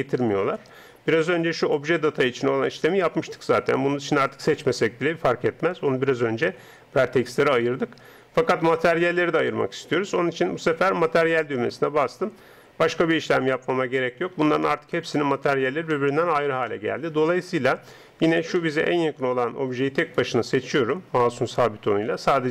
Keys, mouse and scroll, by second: 13.5 middle click, 15.4-16.7 middle drag, 18.2-21.7 middle drag, 20.0 right click.